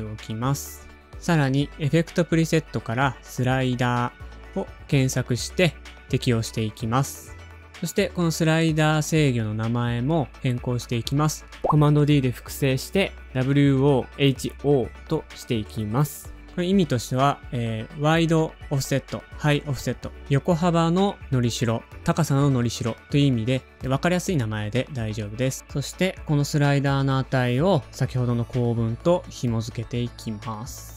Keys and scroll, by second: 0.0-0.6 typing, 2.3-3.6 typing, 6.7 typing, 8.2 Return, 8.9-10.8 typing, 11.6 super+d, 13.0 Return, 13.5-14.7 typing, 25.7 super+d.